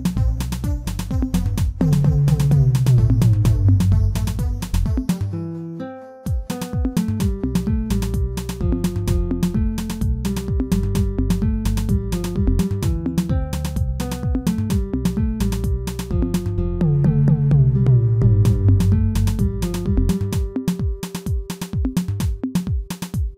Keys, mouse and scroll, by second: 0.9-2.4 middle drag, 2.4 e, 9.4 e, 11.4 middle click, 12.4 alt+click, 12.7-13.9 middle drag, 13.9 alt+click, 14.7-15.8 middle drag, 15.8 shift+click, 16.4 shift+click, 16.9 shift+click, 17.2-18.3 middle drag, 18.3 e.